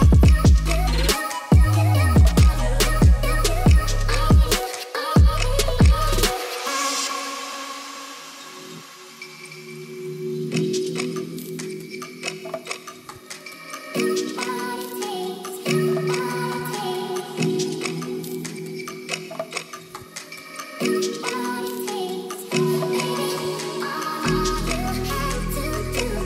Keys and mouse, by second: 0.3 Tab, 0.6 middle click, 1.1 shift+middle click, 1.7 Tab, 2.8 i, 4.0 click, 4.1 s, 6.0 s, 6.3 y, 8.2-8.9 drag, 9.4 s, 9.5 x, 10.2 y, 11.1 click, 11.9 Tab, 12.5 ctrl+s, 14.6 click, 15.3 shift+middle click, 16.7 click, 17.9-19.6 drag, 20.9 click, 21.6 ctrl+s, 24.6-26.2 drag.